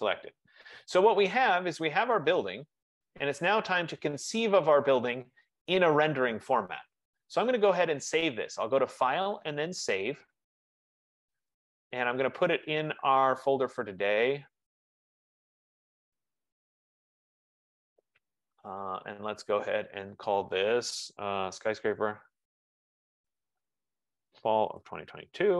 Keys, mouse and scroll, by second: 0.0-0.5 typing, 1.2 Return, 1.2 click, 1.7 z, 3.4 right click, 9.1 click, 10.6 click, 13.2 click, 15.4 click, 17.4 click, 17.6 click, 21.0 click, 21.4-25.5 typing.